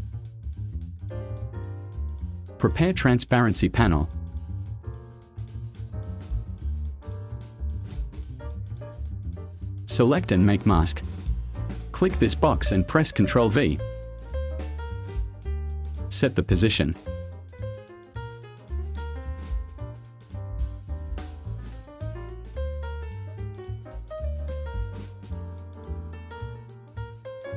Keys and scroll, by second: 5.4 space, 14.3 ctrl+v.